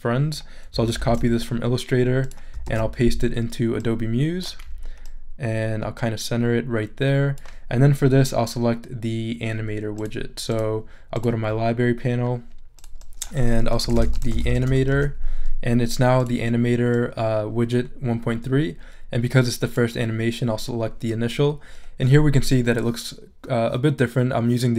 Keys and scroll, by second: 1.0 super+c, 2.6 super+v, 13.6-15.4 typing.